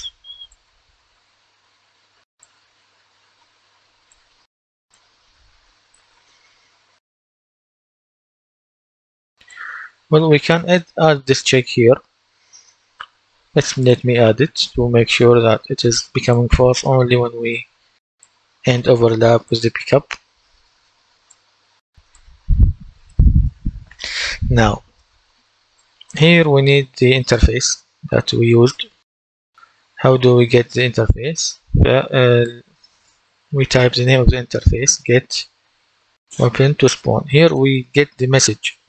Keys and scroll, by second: 14.5 ctrl+d, 33.0-33.8 typing, 35.2-36.4 typing.